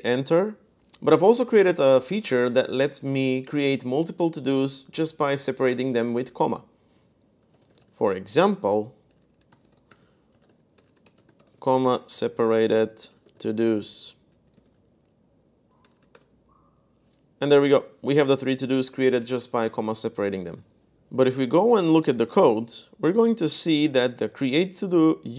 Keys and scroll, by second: 7.0-16.4 typing, 21.2 super+Tab, 22.1-23.5 typing, 23.2 Return, 25.2 Return.